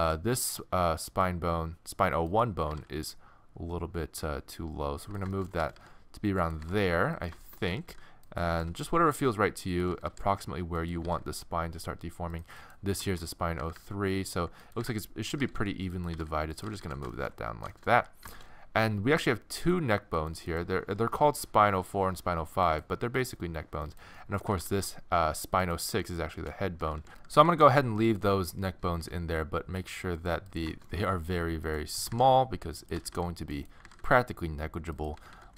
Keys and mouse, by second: 2.6 g, 5.6 a, 5.7 a, 6.4 middle click, 6.6 g, 7.4 click, 7.7 a, 7.9 a, 8.4 g, 9.9 a, 10.1 a, 11.0 g, 13.1-14.5 middle drag, 13.6-16.8 typing, 14.6-16.6 right drag, 16.9 click, 17.1 middle click, 18.5 click, 19.1 middle click, 19.2 click, 19.4-25.6 middle drag, 24.6 r, 26.8 a, 27.0 a, 27.4 a, 27.6 a, 28.1-30.7 middle drag, 28.8 a, 29.0 a, 30.8-31.9 middle drag, 32.1 g, 32.8 click, 33.0 a, 33.1 a, 33.8 g, 34.9 click, 35.2 a, 35.3 a.